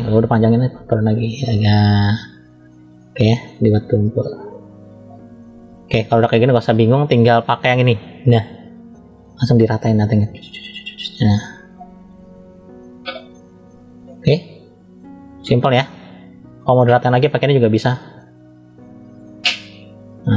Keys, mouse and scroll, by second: 0.5 click, 2.1 middle click, 3.2 click, 5.3 middle click, 6.4 scroll up 1, 7.8 click, 8.8 middle click, 10.0 click, 11.0 middle click, 12.1 click, 13.2 middle click, 14.8 middle click, 16.9 click, 18.0 middle click, 19.3 click.